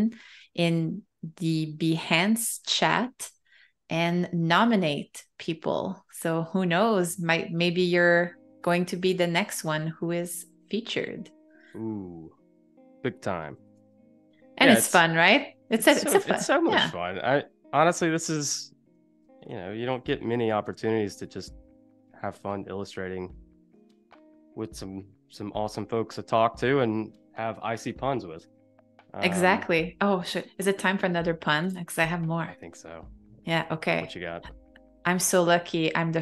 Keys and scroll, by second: 2.3 super+g, 4.6 shift+super+[, 13.7 super+c, 14.2 Escape, 15.1 super+=, 16.1 super+v, 16.6 space, 19.3 shift+super+[, 35.4 space.